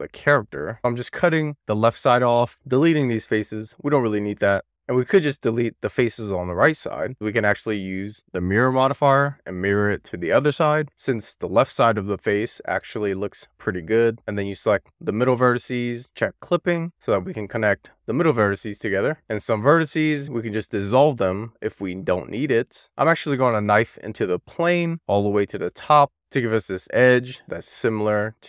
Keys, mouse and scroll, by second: 1.8 shift+click, 3.9 x, 4.7 1, 4.9 click, 6.3 x, 8.4 click, 14.8 click, 16.5 click, 17.2 click, 18.9 click, 19.5 click, 20.6 x, 23.7 k.